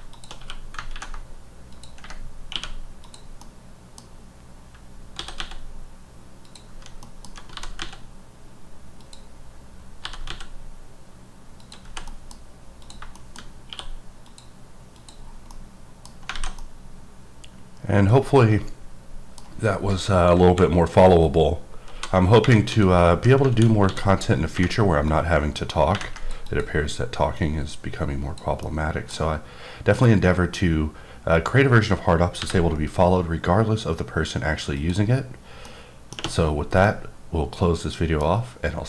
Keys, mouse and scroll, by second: 1.7 click, 3.0 click, 3.4 middle click, 4.3 scroll, 5.1 s, 5.3 x, 6.4 click, 7.0 middle click, 7.5 g, 9.0 click, 9.3-10.0 scroll down 1, 10.0 g, 10.3 x, 11.6 click, 11.9 h, 12.0 middle click, 12.4-12.8 scroll up 2, 12.8 click, 13.1 shift+middle click, 13.4-13.7 scroll up 2, 13.7 q, 14.2 click, 14.9 click, 15.2 scroll down 2, 15.5 middle click, 16.1 scroll down 1, 16.3 alt+a, 16.6-19.4 middle drag, 20.2 KP_2, 20.4 KP_1, 21.3-21.9 scroll up 2, 21.9 f, 22.0 d, 22.7 d, 23.5 alt+w, 23.8 d, 25.1 click, 26.4 click, 27.3 click, 28.6 middle click, 35.3 click, 35.3 scroll, 35.7 middle click, 36.8 middle click, 38.2 scroll down 1.